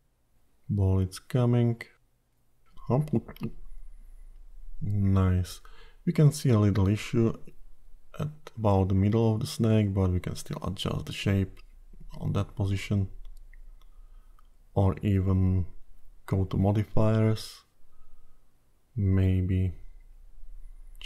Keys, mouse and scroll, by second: 8.4 click, 9.3 click, 9.8 click, 13.9 click, 16.8 click, 18.4-19.9 scroll down 3.